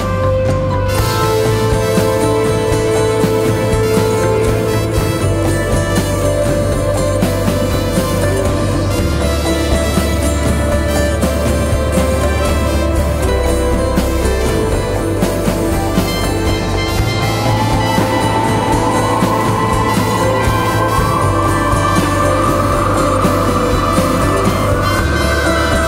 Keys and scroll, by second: 3.9 l, 5.3 k, 6.8 9, 6.9 Return, 7.2 -, 7.9 -, 8.1 Return, 14.6 l, 16.4 k, 17.7 -, 17.8 Return, 24.3 ctrl+z.